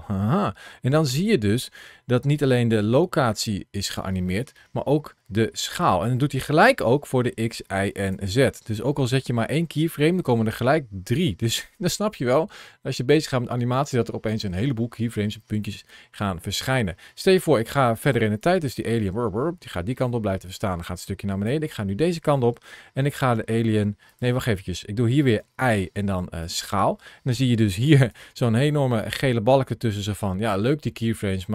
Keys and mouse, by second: 0.9 ctrl+shift+a, 18.2-21.4 drag, 22.8 s, 23.9 right click, 25.2 i, 27.5 ctrl+shift+a.